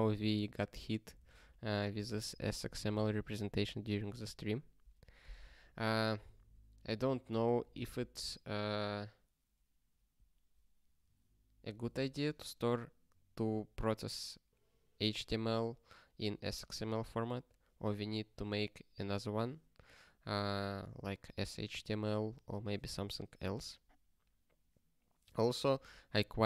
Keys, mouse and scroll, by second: 0.4 ctrl+space, 0.5 ctrl+a, 1.3 ctrl+g, 6.1 ctrl+space, 6.2 ctrl+e, 7.1 ctrl+g.